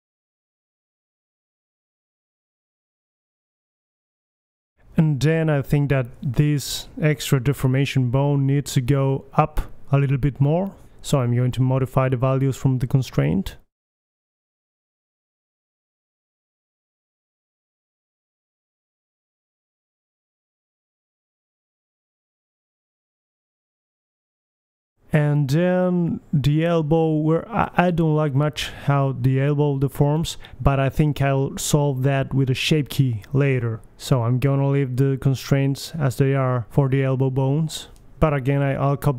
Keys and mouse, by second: 0.4 ctrl+v, 0.9 g, 3.9-4.7 drag, 4.4 g, 4.7 middle click, 5.6-6.6 right drag, 6.1 g, 6.6 click, 7.3-7.9 middle drag, 7.9-8.9 right drag, 7.9 g, 9.3-9.7 drag, 9.7 middle click, 9.8 click, 9.8 right click, 10.2-10.7 middle drag, 10.7 g, 11.9 g, 12.9-13.9 drag, 14.6-16.8 drag, 18.0 middle drag, 18.3-18.7 right drag, 18.3 g, 18.8 right click, 20.8-22.0 middle drag, 21.6 g, 23.1 middle click, 23.5 middle click, 24.4-25.1 middle drag, 24.7 g, 25.4-26.4 middle drag, 25.9 g, 27.9-28.7 right drag, 28.1-28.8 middle drag, 28.3 g, 30.7-31.4 drag, 31.0 right drag, 31.3 g, 31.4 right click, 32.4 middle drag, 32.6 a, 32.7 a, 33.3 alt+g, 33.5 alt+r, 33.9 alt+s, 33.9 a, 34.2 KP_1, 36.5-37.6 middle drag, 37.6-38.6 right drag, 38.5 middle click.